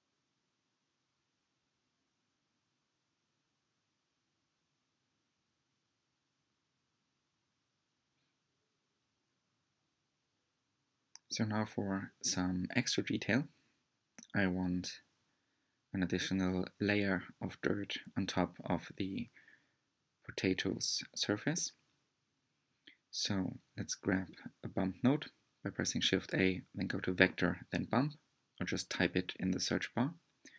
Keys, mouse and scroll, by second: 1.9-2.2 scroll up 2, 2.5-3.5 middle drag, 3.5 scroll down 1, 4.1 scroll down 1, 5.6-7.4 middle drag, 7.4 scroll up 1, 8.9 click, 12.5 click, 12.7 scroll down 2, 13.2-27.0 middle drag, 27.0-30.5 drag.